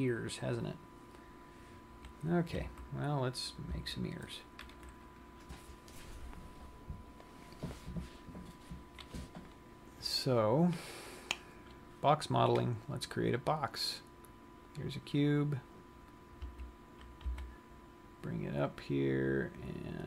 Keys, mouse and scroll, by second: 3.1 z, 4.3 z, 13.7 click, 15.2 click, 16.8 z, 17.7 g.